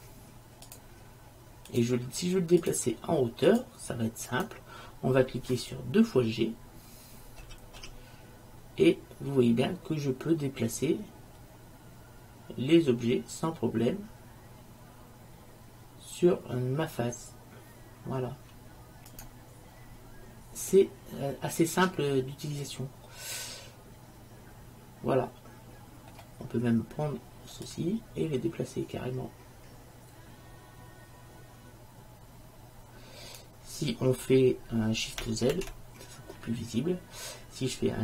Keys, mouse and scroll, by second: 7.5 g, 21.3-22.7 middle drag, 24.1-25.9 middle drag, 27.7-29.5 drag, 35.7 shift+z.